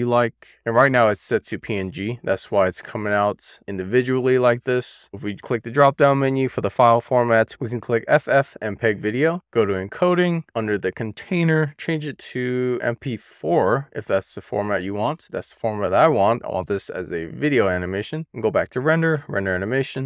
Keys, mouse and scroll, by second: 1.8 click, 3.3 click, 4.2-5.3 scroll down 1, 5.3-9.4 drag, 9.8-10.3 scroll down 1, 10.6-16.7 drag, 18.8-20.0 drag.